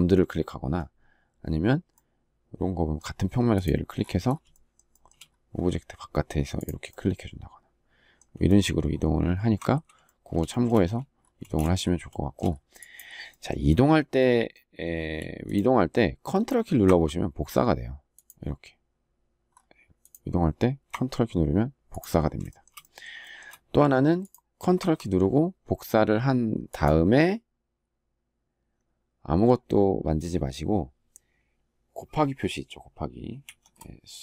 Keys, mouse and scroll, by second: 4.2 shift+middle click, 4.6 shift+middle click, 9.1 ctrl+z, 9.8 shift+middle click, 11.1 space, 11.8 shift+middle click, 22.2 shift+middle click, 33.1 shift+8.